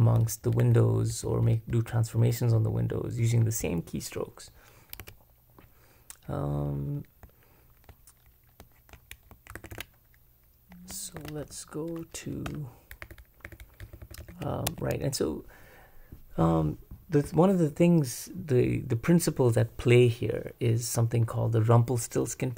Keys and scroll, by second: 0.9-3.0 typing, 5.0 w, 9.5 super+b, 9.7 super+b, 11.2 super+b, 12.5 Return, 13.0-14.7 typing.